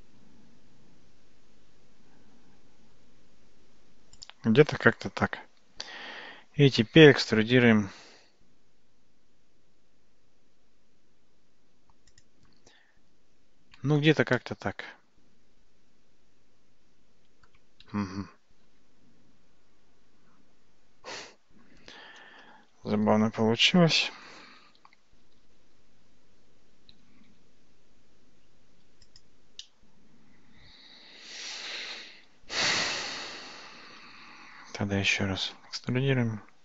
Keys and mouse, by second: 8.1 e, 13.8 Tab, 14.4-17.5 middle drag, 18.2 ctrl+z, 18.7 ctrl+z, 25.2 g, 29.6-31.9 middle drag, 35.6 e.